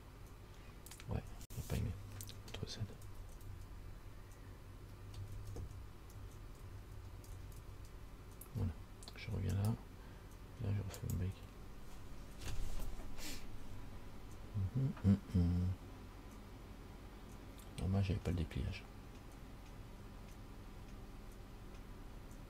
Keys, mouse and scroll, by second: 3.2 ctrl+z, 3.6 ctrl+z, 5.5 ctrl+z, 5.8 ctrl+z, 6.4 ctrl+z, 6.8 ctrl+z, 7.1 ctrl+z, 7.5 ctrl+z, 7.8 ctrl+z, 8.2 ctrl+z, 9.7 right click, 11.2 click.